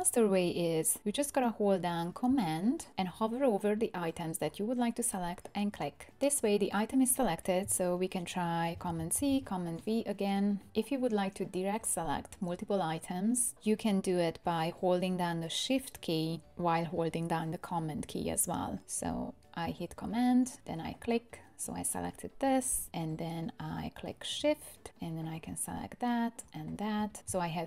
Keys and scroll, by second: 8.9 super+c, 9.3 super+v.